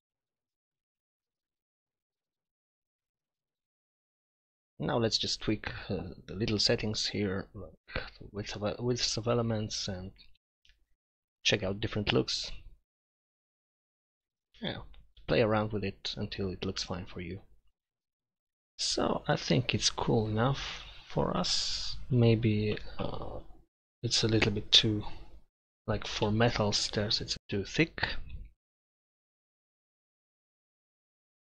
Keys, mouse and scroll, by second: 0.1 middle click, 7.9 middle click, 9.3-9.8 middle drag, 10.3-11.7 middle drag, 11.8 middle click, 14.5 BackSpace.